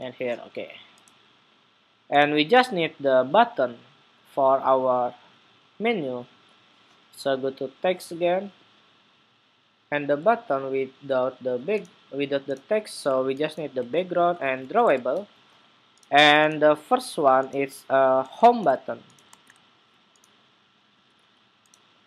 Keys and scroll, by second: 19.0 super+Tab.